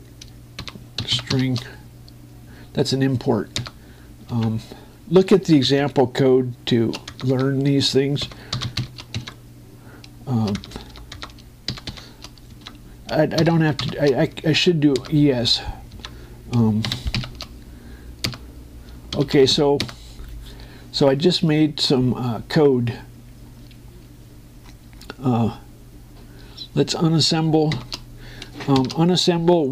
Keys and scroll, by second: 1.3 shift+-, 4.3 Return, 5.1 Tab, 6.3 shift+m, 8.9 shift+p, 9.9 Tab, 11.3 BackSpace, 13.4 Tab, 14.1 shift+Left, 15.7 Return, 16.8 Tab, 17.6 shift+Left, 18.9 Return, 19.8 shift+1, 20.6 Return, 28.4 shift+', 29.4 shift+9.